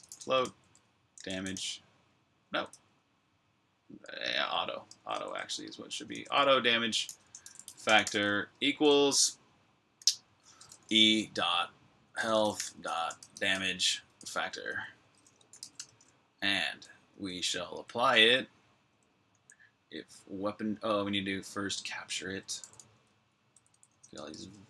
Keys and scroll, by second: 0.0-1.8 typing, 3.3 typing, 4.1 Escape, 4.8-8.8 typing, 10.3-16.9 typing, 18.7-19.5 typing, 20.6-24.6 typing.